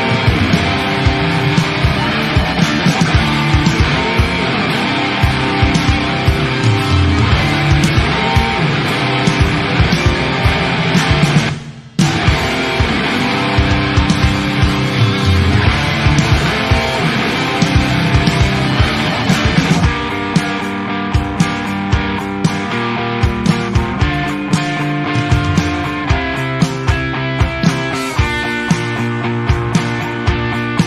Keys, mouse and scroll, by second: 0.2 shift+click, 0.5 middle click, 0.9 ctrl+e, 1.4 alt+a, 1.7-2.8 middle drag, 2.8 click, 3.2 shift+click, 3.6 shift+click, 3.9 shift+click, 4.2 middle click, 4.9-5.6 scroll up 2, 5.0 middle click, 5.6 shift+click, 6.0 shift+click, 6.4 shift+click, 6.6 shift+middle click, 7.1 shift+click, 7.5 ctrl+e, 8.0-9.2 middle drag, 9.2 ctrl+r, 10.4 click, 10.7 shift+click, 11.1 shift+click, 11.5 shift+click, 11.7 shift+middle click, 12.2 shift+click, 12.6 shift+drag, 12.9 shift+click, 13.2 shift+click, 13.6 ctrl+e, 14.0 scroll down 1, 14.2 middle click, 15.1 Tab, 16.2 click, 19.5-22.2 drag, 24.7-26.8 drag, 30.3-30.8 drag.